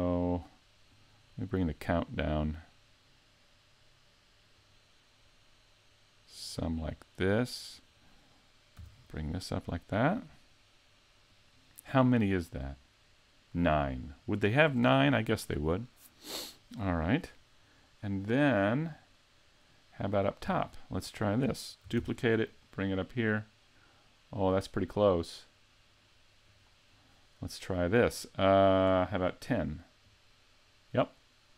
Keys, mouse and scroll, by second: 0.9 click, 1.1 click, 1.3 click, 1.5 click, 2.0 click, 4.6 click, 6.4 click, 7.7 right click, 8.8 g, 11.4 click, 12.3 right click, 18.4 middle click, 19.1 middle click, 21.9 shift+d, 26.6 click, 28.1-29.8 scroll up 1, 30.0 click.